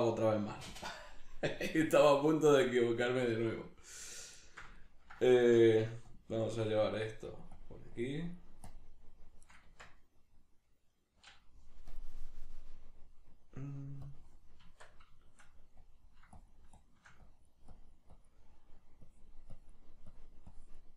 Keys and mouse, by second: 1.5 g, 3.8 click, 4.4-6.1 shift+middle drag, 5.4 Tab, 6.1-15.2 drag, 9.7 Tab, 14.7 Tab, 15.2 shift+middle click, 15.8-20.9 drag.